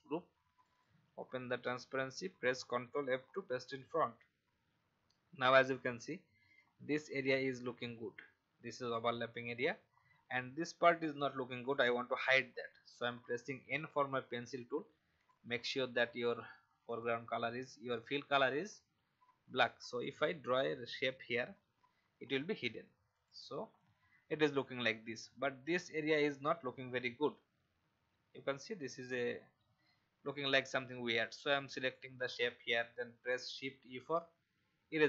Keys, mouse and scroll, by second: 3.5 ctrl+f, 5.7 click, 6.6-7.0 alt+scroll up 1, 9.9 alt+scroll up 1, 13.4 n, 15.2 click, 22.4 v, 23.1 click, 23.7 alt+scroll down 1, 25.7-26.1 alt+scroll up 1, 31.7 click, 33.8 shift+e.